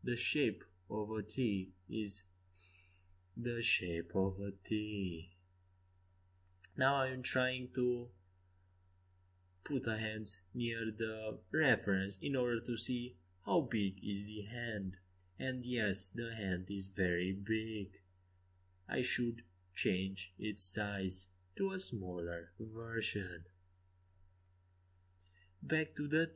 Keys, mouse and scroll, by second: 1.9 r, 5.7 g, 8.0 r, 9.5 g, 11.1 r, 12.2 g, 18.8 r, 21.3 g, 26.0 ctrl+z.